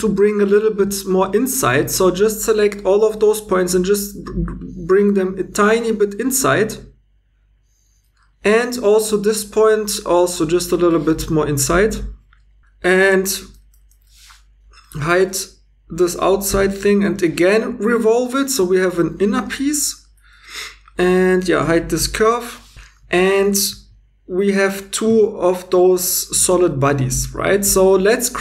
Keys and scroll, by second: 2.8 g, 16.5-16.8 typing, 21.1 2, 22.0 h, 25.1 Tab.